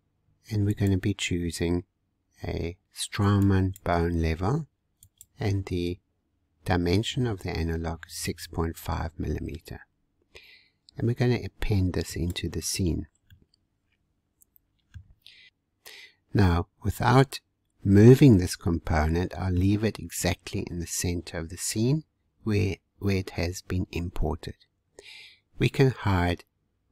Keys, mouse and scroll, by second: 0.7-3.8 drag, 5.1-8.1 drag, 12.1 click, 13.0-13.3 scroll down 1, 13.3-15.5 middle drag, 18.1-20.2 middle drag, 20.2-21.4 scroll up 1, 21.5-24.4 scroll down 1.